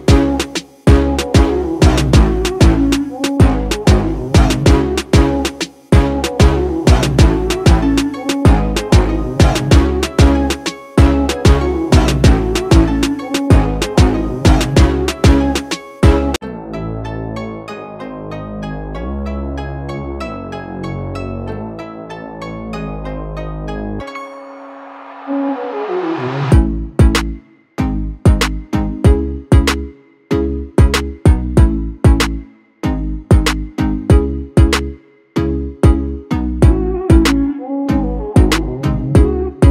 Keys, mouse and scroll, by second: 3.1-5.4 drag, 18.7 click, 19.6 ctrl+space, 19.8 ctrl+click, 20.1 ctrl+space, 20.8-22.4 drag, 22.8 alt+scroll down 1, 23.7-26.6 drag, 27.8 alt+scroll down 1, 28.2 space, 28.3 click, 28.7 space, 29.1 click.